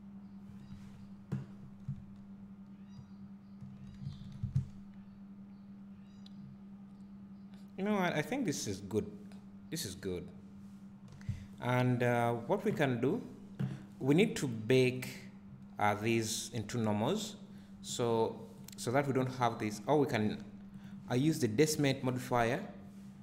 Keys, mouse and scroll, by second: 0.9-1.6 scroll down 1, 1.9 `, 4.2 alt+a, 4.5 `, 11.5 click, 14.4 click, 15.0 click, 18.1 click, 18.6 click, 19.3 `, 20.8 click, 21.1-21.8 scroll up 1, 21.8 `.